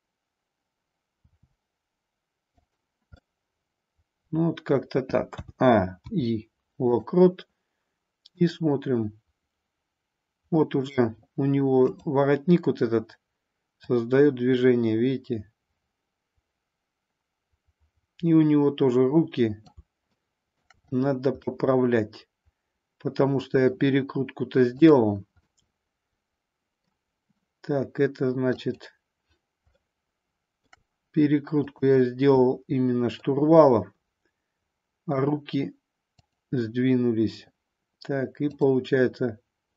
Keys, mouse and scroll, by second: 1.2 r, 2.7 click, 3.2-4.7 middle drag, 5.3 a, 5.9 i, 8.3-10.9 drag, 13.8-19.7 drag, 20.1-20.7 shift+middle drag, 21.3-23.7 middle drag, 24.7 click, 25.4-26.9 middle drag, 28.6 click, 29.8-30.8 shift+middle drag, 33.2-35.2 middle drag, 36.3-37.4 drag, 38.6 click.